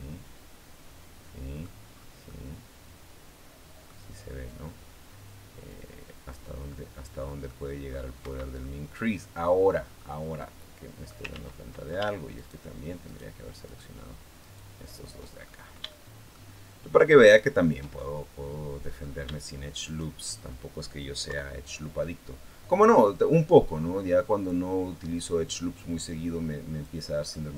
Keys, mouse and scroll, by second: 1.7 scroll up 1, 2.1-3.8 middle drag, 5.5 click, 6.5 middle click, 8.0 Escape, 8.4-9.7 middle drag, 9.7 scroll up 1, 10.1 middle click, 11.1 ctrl+z, 12.1 shift+right click, 12.8 shift+right click, 13.4 shift+right click, 14.2 shift+right click, 14.7 shift+right click, 15.5 scroll up 2, 15.7 shift+right click, 15.7 shift+middle click, 17.0 shift+right click, 17.7 shift+middle click, 18.7 scroll up 2, 19.6 shift+right click, 20.1-20.5 shift+scroll down 2, 21.1 KP_3, 23.5-26.8 drag, 27.1 middle click.